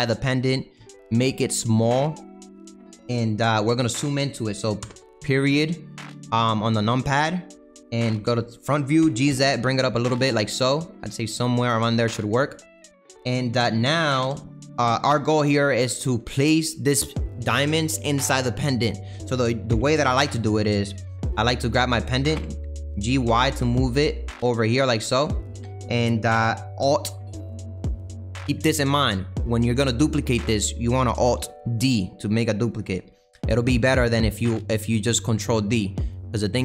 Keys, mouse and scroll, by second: 0.8 s, 4.8 KP_Decimal, 5.7-8.0 scroll down 13, 8.0 KP_1, 9.0 g, 12.0 middle click, 12.7-14.2 scroll up 2, 14.2 KP_7, 15.7 g, 19.6 g, 22.3 g, 31.5 alt+d.